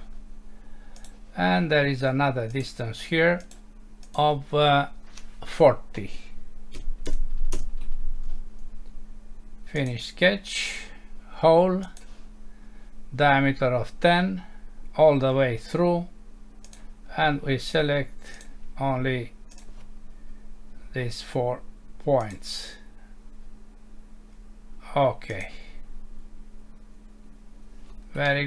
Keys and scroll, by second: 7.6 Return, 28.3 F6.